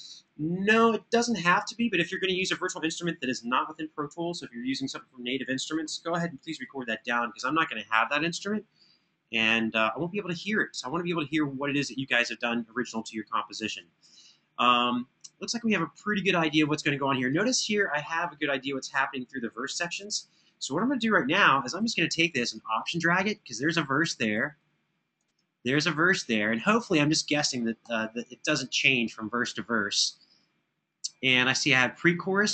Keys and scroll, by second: 20.9 super+[, 27.5 Right.